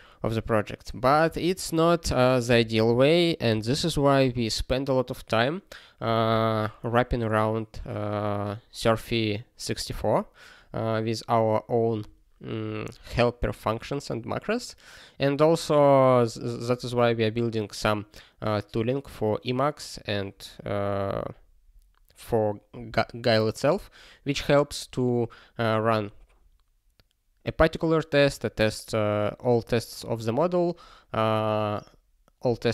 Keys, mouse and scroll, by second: 1.3 ctrl+n, 2.5 ctrl+g, 2.8 ctrl+p, 3.6 ctrl+space, 3.7 ctrl+e, 5.0 ctrl+g.